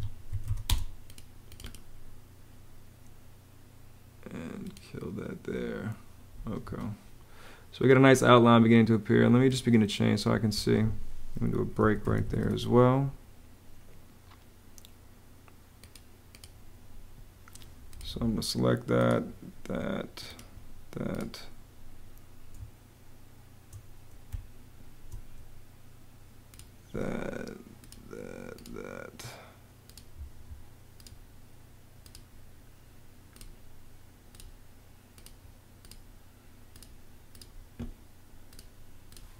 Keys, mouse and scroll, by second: 0.0-0.7 typing, 6.4 Escape, 10.3 Escape, 11.4-12.6 typing, 24.1 space.